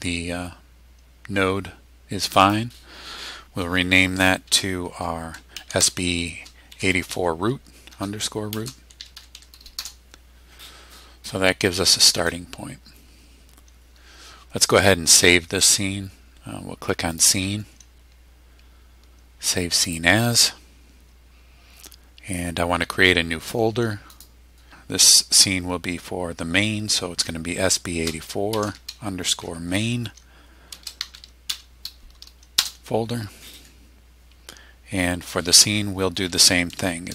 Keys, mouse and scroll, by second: 2.2 click, 5.3-9.8 typing, 17.1 click, 19.8 click, 24.1 click, 27.2 shift+b, 28.3-29.3 typing, 30.5-32.0 typing, 32.6 Return.